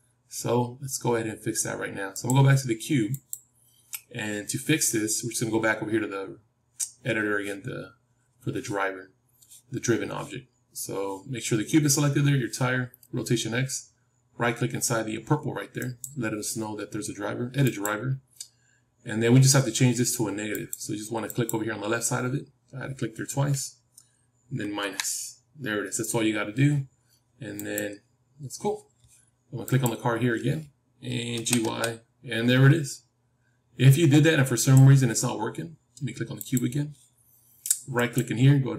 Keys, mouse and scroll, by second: 3.0-5.1 drag, 15.7-18.2 right drag, 29.6-31.6 drag, 31.3 g, 36.3-38.4 drag, 37.9-38.7 right drag.